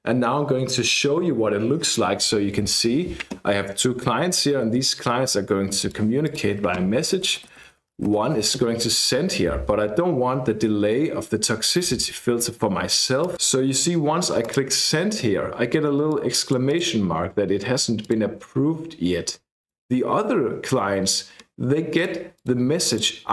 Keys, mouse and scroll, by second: 5.9 click, 6.3 click, 6.9-8.6 typing, 13.2 click, 14.4 click, 16.1-17.3 drag, 18.0 click, 19.6 click, 22.0 click, 22.9 click.